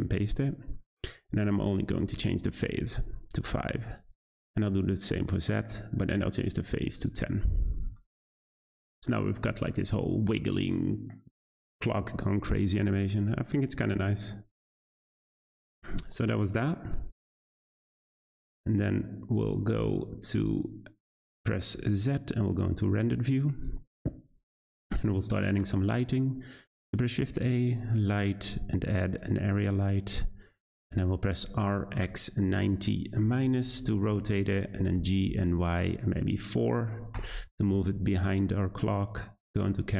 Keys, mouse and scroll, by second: 0.3-1.0 scroll down 4, 2.0-4.0 drag, 4.2 click, 5.5-6.1 drag, 6.1-6.5 scroll down 4, 7.0-8.9 drag, 9.6 space, 15.3 space, 18.5-20.3 drag, 20.3-21.7 scroll down 1, 21.7 z, 24.1-25.6 scroll up 1, 25.6 shift+a, 29.5-30.2 scroll down 2, 30.2-30.7 scroll down 1, 30.7 scroll up 1, 30.7 middle drag, 31.0-31.4 scroll down 2, 31.4 r, 34.7 g, 38.8 `.